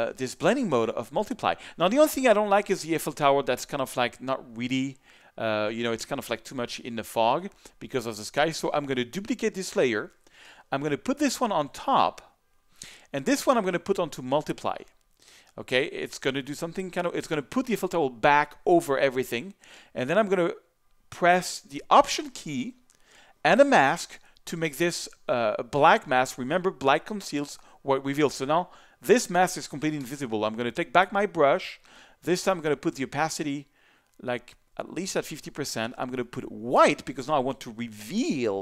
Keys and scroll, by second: 30.0 b, 36.8 x.